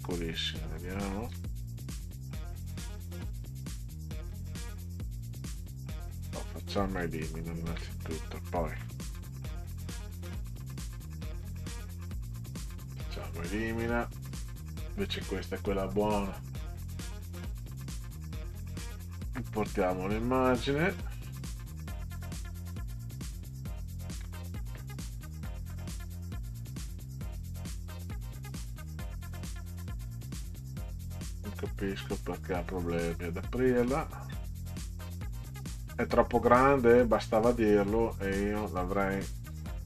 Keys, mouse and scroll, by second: 0.7 ctrl+scroll up 2, 2.0 middle click, 4.5 right click, 6.3 click, 7.2 ctrl+scroll down 2, 8.9 click, 11.8 right click, 12.5-12.9 scroll down 2, 13.2 click, 14.2 click, 16.8-18.7 drag, 23.8 ctrl+scroll down 2, 27.3 click, 29.9-30.2 ctrl+scroll up 4, 31.0-31.8 ctrl+scroll up 6, 32.4-33.0 ctrl+scroll up 4, 33.5 ctrl+scroll up 2, 33.9-34.7 ctrl+scroll down 6, 37.4 right click, 38.1-38.5 scroll down 2, 38.6 click.